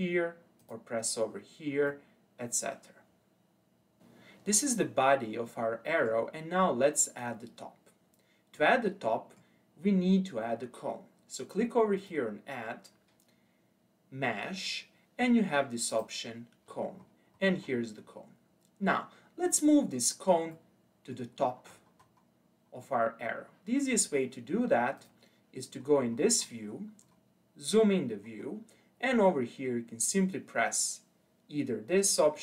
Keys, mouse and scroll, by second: 0.6 click, 1.9-4.0 middle drag, 4.5-5.1 scroll up 2, 5.1-5.5 scroll down 2, 5.5-6.5 middle drag, 6.5-8.5 scroll up 1, 8.5-11.6 middle drag, 12.0-15.1 drag, 16.7-18.4 scroll up 11, 18.4-20.5 scroll down 3, 20.5-21.4 middle drag, 21.4-22.6 scroll down 9, 22.6-25.0 scroll up 1, 25.0 click, 25.7-27.7 scroll up 10, 27.7-31.2 scroll down 8.